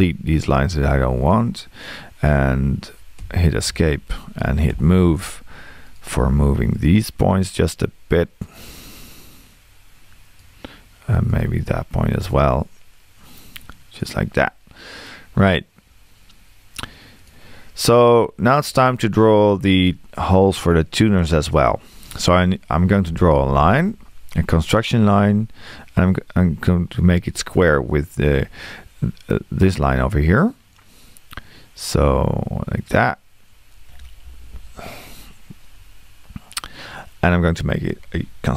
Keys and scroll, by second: 3.2 Escape, 4.7 m, 23.1 l, 35.8 Escape.